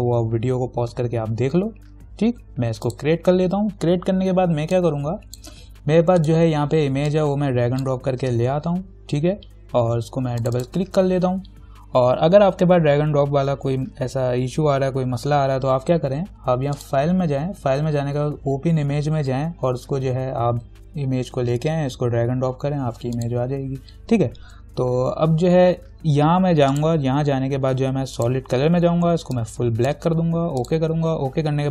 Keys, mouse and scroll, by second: 0.8-2.6 scroll down 2, 3.1 click, 5.2 click, 6.4-10.6 drag, 7.6 click, 8.4 click, 17.0 click, 23.4 click, 26.9 click.